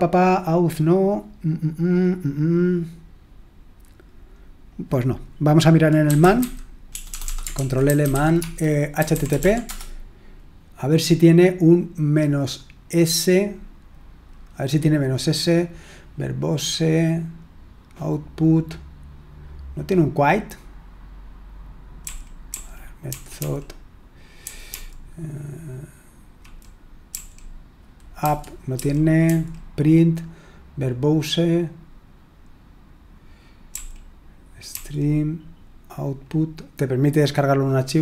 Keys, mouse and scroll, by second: 2.6-3.5 scroll up 1, 4.4-5.5 scroll down 1, 5.8-9.8 typing, 7.5 ctrl+l, 22.0-25.1 typing, 26.3-27.0 typing, 28.2-29.2 typing, 33.7-34.6 typing.